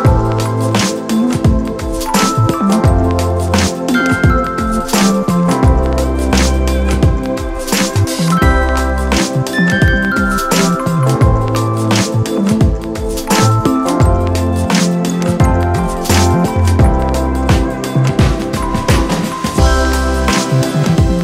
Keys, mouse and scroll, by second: 5.9 ].